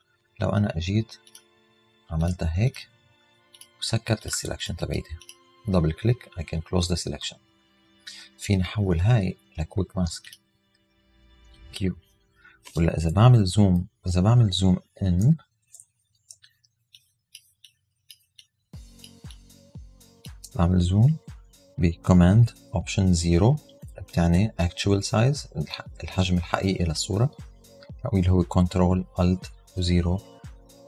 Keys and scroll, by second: 15.2 alt+super+0, 16.4 alt+super+space, 16.9 alt+space, 23.8 alt+super+0.